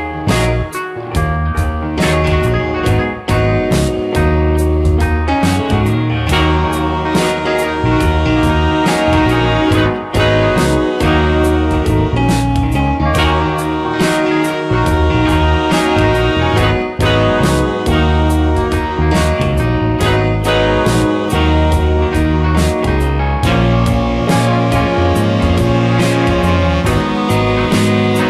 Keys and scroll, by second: 1.4 space, 8.2 space, 13.7 space, 26.2 space.